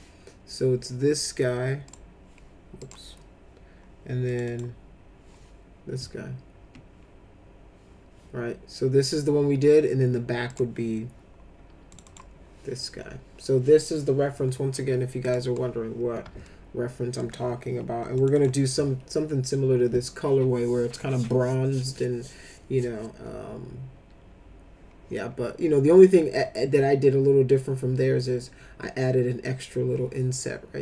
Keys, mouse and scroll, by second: 1.8 click, 2.8 click, 4.3 click, 4.5 click, 10.5 click, 11.9 click, 12.0 click, 15.2 click, 16.4 alt+middle click, 18.2 click, 18.3 click.